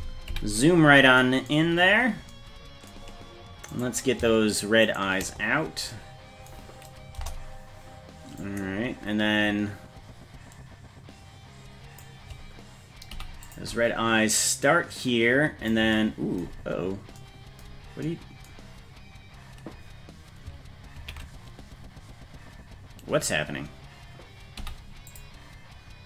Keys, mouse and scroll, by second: 0.3 KP_Decimal, 1.6-2.9 scroll down 10, 3.8 right click, 4.9 shift+right click, 7.2 KP_0, 8.4-12.0 drag, 13.1 i, 14.4-15.7 drag, 17.5 scroll down 1, 18.3 scroll down 2, 21.5 ctrl+z, 24.6 i.